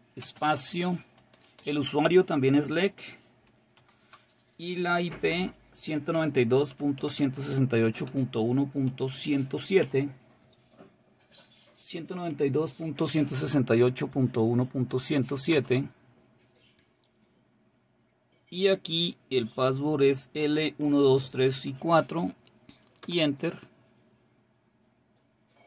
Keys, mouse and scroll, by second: 15.6 Return, 19.5 typing, 22.0 typing, 23.1 Return.